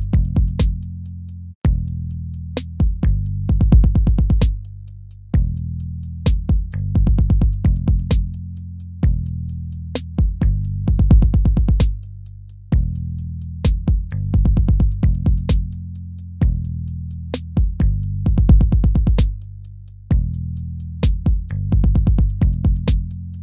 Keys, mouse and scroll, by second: 1.9 ctrl++, 7.9 ctrl++, 9.0 ctrl+-, 9.9 ctrl++, 10.2 ctrl++, 10.5 ctrl++, 12.6 ctrl+-.